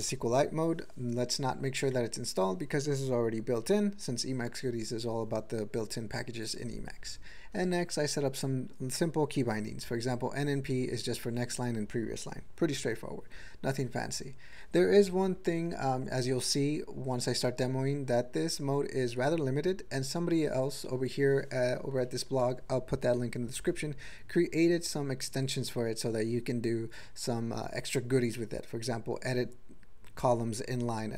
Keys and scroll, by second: 2.2 Down, 7.2 Down, 7.5 Down, 14.9 Up, 15.2 Up, 15.5 Up, 15.8 Up, 16.0 Up, 20.9 Up, 22.1 ctrl+e.